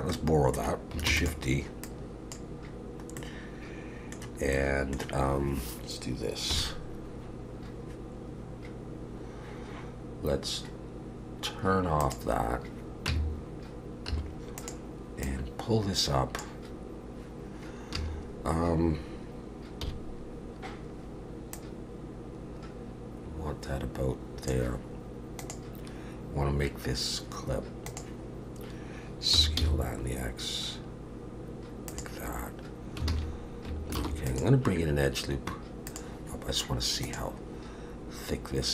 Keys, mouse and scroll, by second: 0.1 middle click, 1.1 shift+d, 1.8 click, 3.2 middle click, 4.5 middle click, 6.5 KP_1, 12.0 click, 13.1 Tab, 14.1 2, 14.6 click, 15.3 click, 18.0 a, 19.8 KP_1, 21.5 click, 29.3 s, 33.1 alt+a, 34.0 ctrl+r.